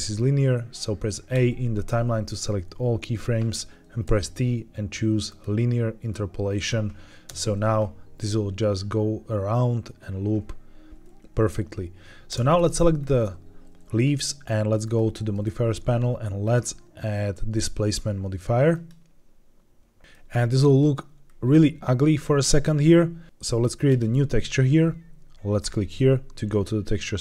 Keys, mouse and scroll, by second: 1.2 a, 4.0 t, 7.2 space, 12.2 space, 12.4 click, 12.9-13.6 scroll up 2, 14.7 click, 16.3-19.4 drag, 20.0-20.8 middle drag, 21.1-21.8 scroll up 1, 23.8 click, 25.5 click.